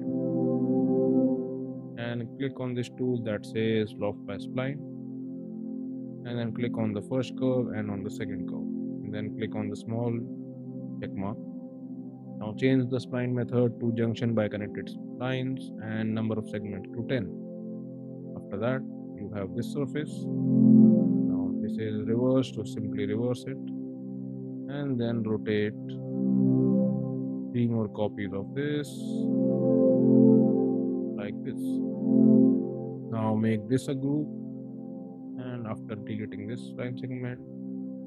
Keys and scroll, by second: 20.3 x, 24.8 q, 29.1 3, 29.8 x, 30.3 Return, 30.7 space, 34.2 ctrl+g, 35.4 e, 37.1 space.